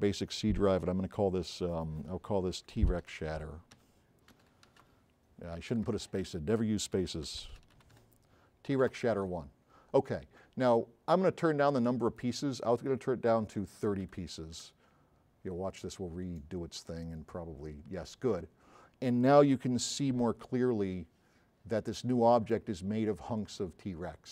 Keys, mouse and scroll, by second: 2.7-5.8 typing, 6.9-8.9 typing, 9.1 Return, 12.1 click, 14.0 KP_3, 14.2 KP_0, 14.6 KP_Enter, 19.8 s, 19.9-21.5 right drag.